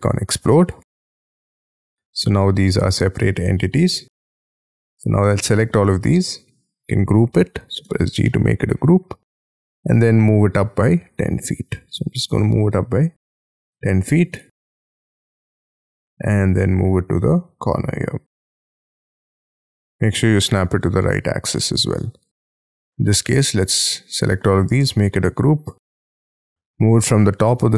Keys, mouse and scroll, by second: 4.2 scroll up 4, 4.5 middle click, 7.9 g, 8.2 middle click, 9.4 scroll up 3, 9.5 ,, 9.9 m, 12.2 1, 12.6 0, 13.4 Return, 14.0 space, 14.6 ,, 14.9 m, 15.7 shift+middle click, 16.3 scroll down 3, 17.3 shift+scroll up 5, 18.8 shift+click, 19.3-19.6 scroll down 5, 19.6 middle click, 20.3 shift+scroll down 3, 20.5 space, 21.0 shift+middle click, 21.4 shift+middle click, 21.9 space, 22.6 middle click, 23.9-24.5 scroll up 5, 24.5 g, 24.8 middle click, 26.0 m, 26.4-27.7 scroll up 17.